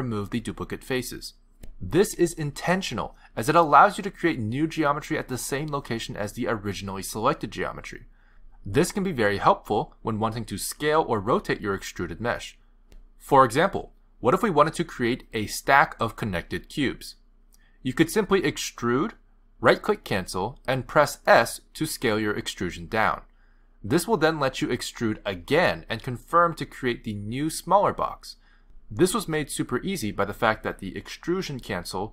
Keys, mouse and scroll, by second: 3.6 click, 5.0 click, 16.1 click, 17.4 click, 18.5 click, 20.1 s, 23.2 click.